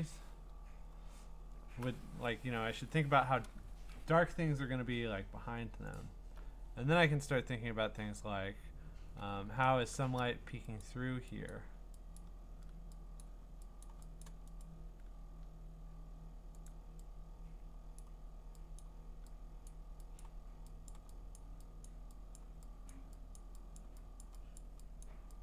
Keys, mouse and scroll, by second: 0.5-3.1 scroll, 5.9 alt+click, 9.3-10.8 scroll, 10.8 click, 11.5 click, 12.2 click, 13.2 click, 13.8 click, 14.2 click, 14.6 right click, 16.7 click, 18.0 click, 18.8 click, 19.7 click, 20.2 click, 20.9 click, 21.4 click, 21.9 click, 22.4 click, 22.9 click, 23.4 click, 23.8 click, 24.2 click, 24.6 click, 25.0 click.